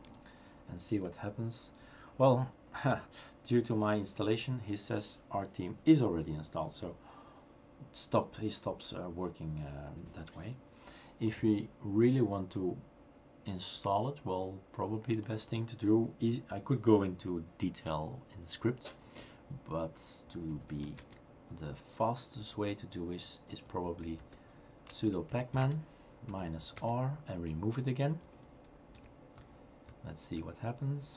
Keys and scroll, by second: 0.0 Return, 0.6-1.3 typing, 2.9 BackSpace, 20.1-21.3 typing, 22.4-26.7 typing, 28.0-29.4 typing, 29.8 Tab.